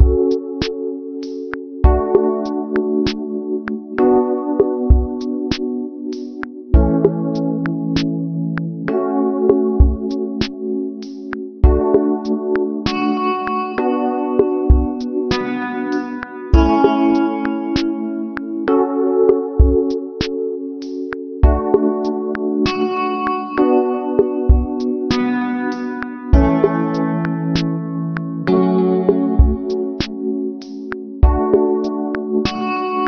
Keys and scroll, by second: 1.0 ctrl+=, 2.5 space, 3.3 ctrl+=, 4.7 space, 7.0 ctrl+alt+shift+n, 22.2 ctrl+z, 29.8 ctrl+z.